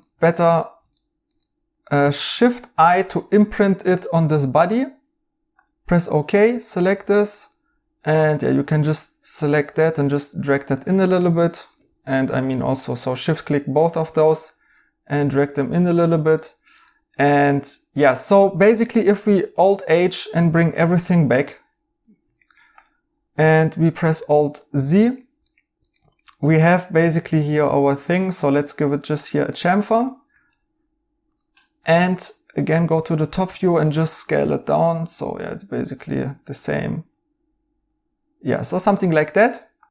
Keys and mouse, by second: 2.7 l, 6.0-6.9 typing, 8.2 3, 11.3 right click, 11.8 ctrl+z, 16.3 right click, 19.3 alt+h, 22.3 right click, 24.0 alt+z, 24.7 right click, 26.7 2, 29.5 right click, 30.2 Tab, 31.7 Tab, 33.4 s, 39.0 right click.